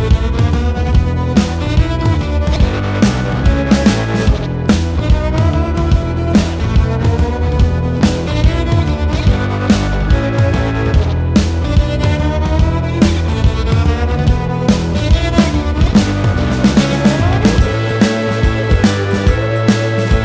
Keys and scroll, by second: 1.2 space, 4.6 space, 5.3 l, 7.0-10.2 typing, 12.6 m, 16.5 space, 17.4 m.